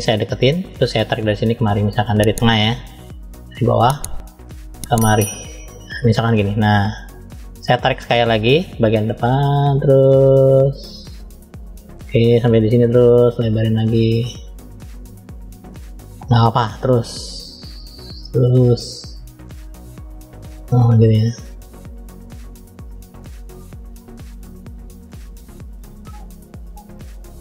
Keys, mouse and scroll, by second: 3.8 click, 17.6 click.